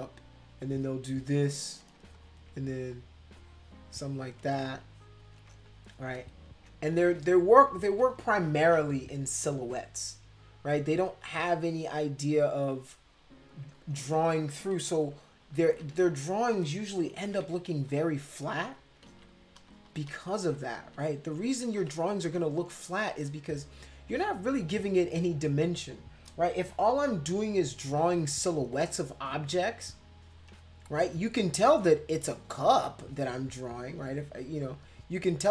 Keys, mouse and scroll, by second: 0.0-1.8 drag, 2.0 space, 2.1 click, 2.9 click, 3.3 click, 4.4 space, 4.5 click, 5.7 click, 6.1 space, 6.1 click, 6.9 click, 7.7 space, 8.8 ctrl+-, 8.9 ctrl+-, 11.1-13.3 drag, 13.5 click, 13.8 ctrl+z, 14.7 ctrl+=, 14.9 ctrl+=, 15.7 ctrl+z, 17.2 ], 17.4 ], 17.9 click, 19.1 ctrl+z, 19.5 ctrl+z, 19.9 ctrl+z, 20.1 ctrl+z, 20.4 ctrl+z, 20.8 ctrl+z, 21.8 space, 21.8 click, 23.1 click, 24.5 click, 24.7-30.6 drag, 31.3-32.6 drag, 33.0-34.7 drag.